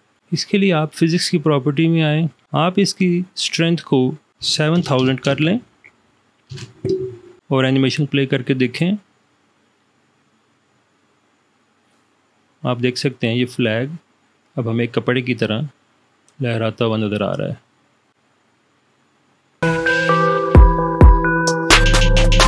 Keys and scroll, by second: 4.6 7, 4.9 0, 6.6 Return.